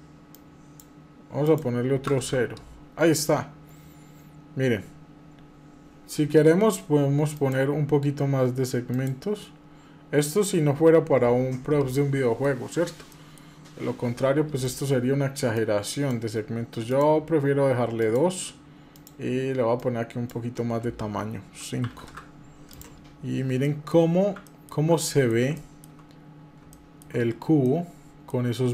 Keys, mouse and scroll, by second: 4.6 scroll up 1, 5.0 scroll down 1, 7.1 click, 8.7 click, 11.1 scroll down 1, 12.2 middle click, 12.5 scroll down 2, 12.8 middle click, 14.4-16.8 drag, 17.8 click, 18.7-21.9 drag, 22.5 click, 22.8 scroll up 1, 23.4 middle click, 24.2 middle click, 24.7 middle click, 25.3 shift+middle click, 25.7-26.1 shift+scroll up 2, 26.5 shift+middle click, 26.9 scroll up 1, 27.4 shift+middle click, 28.5 click.